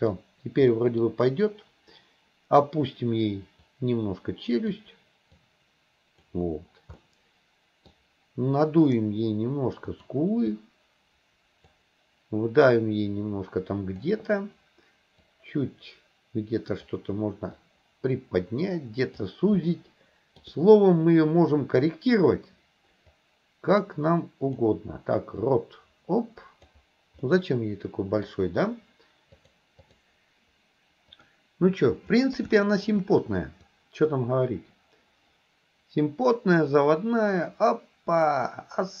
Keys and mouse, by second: 0.8 middle click, 3.7-4.8 drag, 5.4 click, 7.1 middle click, 10.0 click, 10.6-11.8 drag, 12.8-14.1 drag, 15.3-17.0 drag, 17.7-19.3 drag, 19.8 shift+middle click, 23.2-24.7 drag, 25.6-26.8 drag, 27.4 middle click, 29.6-30.1 drag, 30.3 KP_1, 31.2 click, 32.6 shift+middle drag, 33.8-39.0 drag.